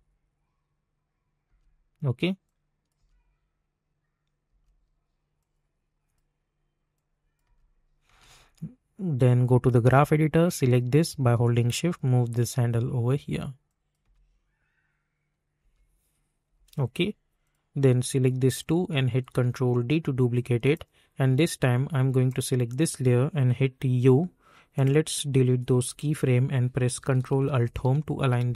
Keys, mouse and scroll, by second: 2.4 click, 2.9 space, 5.4-7.4 drag, 7.4 space, 9.4-12.7 drag, 14.0 space, 16.5 j, 17.4 click, 18.5 shift+click, 19.2 ctrl+d, 20.6 click, 23.9 u, 24.7 click, 27.6 ctrl+alt+Home.